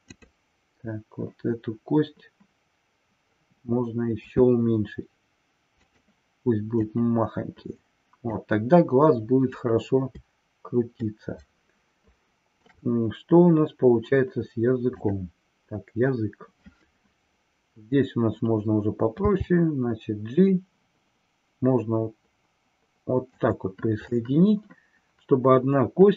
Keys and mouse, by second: 0.1 click, 7.0-8.5 drag, 11.0-12.7 shift+middle drag.